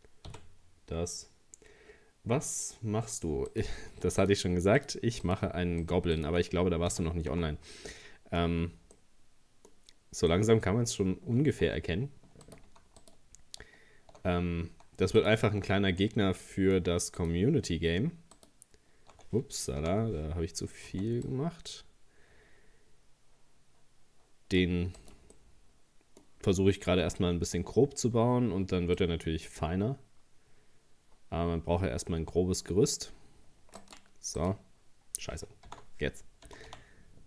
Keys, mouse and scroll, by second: 0.3 f, 3.5 right click, 4.2 shift+right click, 4.8 shift+right click, 5.3 shift+right click, 5.8 shift+right click, 6.2 shift+right click, 6.9 f, 7.3 Tab, 7.5-7.9 scroll down 3, 7.9 middle click, 8.6-9.0 scroll down 1, 9.0 middle click, 9.8-10.2 scroll up 2, 10.3 middle click, 11.1-11.6 scroll up 1, 11.7 Tab, 12.5 right click, 13.0 alt+shift+right click, 15.2 alt+shift+right click, 16.0-17.2 middle drag, 17.2 alt+shift+right click, 18.4 alt+shift+right click, 19.8 ctrl+z, 20.9 c, 25.4-27.0 middle drag, 27.0 c, 34.4 right click, 35.7 ctrl+z, 36.5 g.